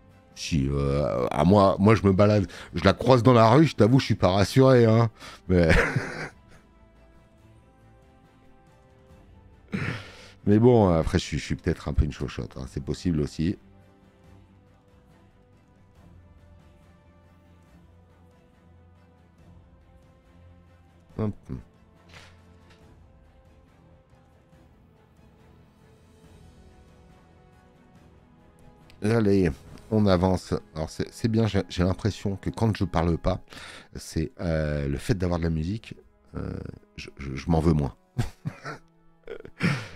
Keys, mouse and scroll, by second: 25.8 space, 26.0 click.